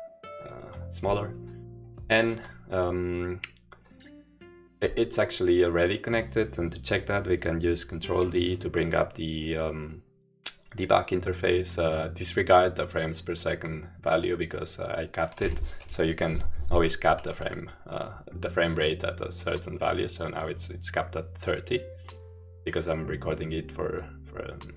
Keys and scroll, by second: 8.1 ctrl+d, 15.8 p.